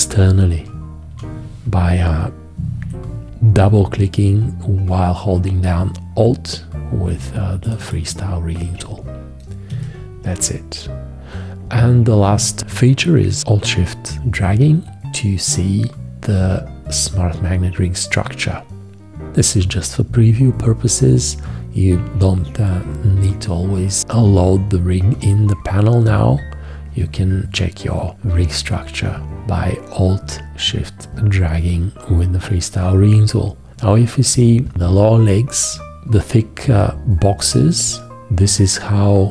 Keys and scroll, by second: 0.2 Right, 2.8 F4, 9.7 Escape.